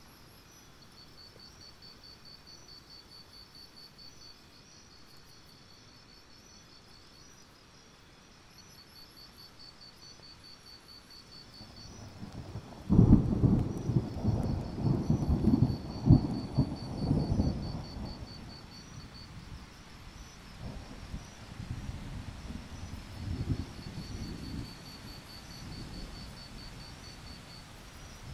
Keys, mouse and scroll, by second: 0.6-1.6 scroll up 1, 2.9-3.7 scroll down 1, 3.7 click, 4.3 scroll down 1, 4.6-5.0 alt+scroll up 1, 5.1-5.5 alt+scroll down 1, 5.6 alt+scroll up 1, 6.0-8.2 drag, 10.7 alt+scroll up 1, 10.9 click, 11.9 shift+click, 12.1 shift+click, 12.3 right click, 13.3 click, 13.7-14.0 alt+scroll down 1, 14.0-14.8 scroll up 2, 14.9 alt+click, 15.9 click, 16.4 ctrl+z, 16.7 click, 16.9 shift+click, 17.0 right click, 18.0-20.2 drag, 20.5-20.9 alt+scroll down 1, 21.0 alt+scroll up 1, 21.1-22.2 scroll down 1, 22.2 ctrl+scroll down 1, 22.5 click, 23.0-24.5 alt+scroll up 2, 24.5 click, 25.2 scroll up 2, 25.7-27.2 drag, 27.7-28.2 scroll down 1.